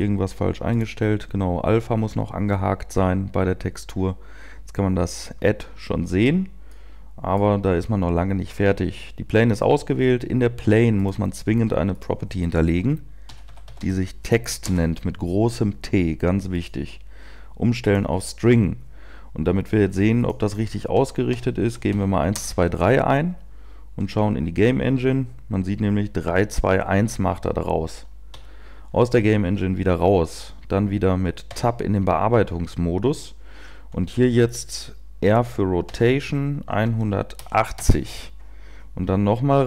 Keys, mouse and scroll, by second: 0.7 click, 0.7-7.1 scroll down 6, 31.6 Tab, 36.7 r.